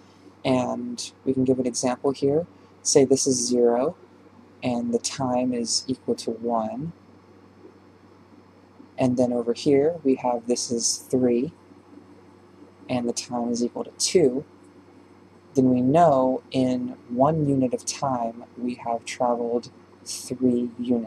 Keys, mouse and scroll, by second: 2.1 d, 3.8-13.6 drag, 13.6 d, 13.8-21.0 drag.